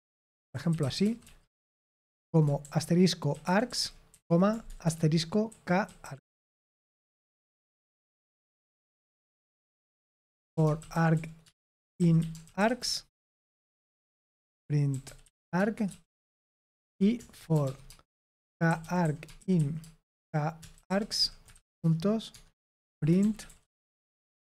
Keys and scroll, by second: 0.0-8.0 typing, 8.8 Return, 9.4 Tab, 10.0-24.4 typing.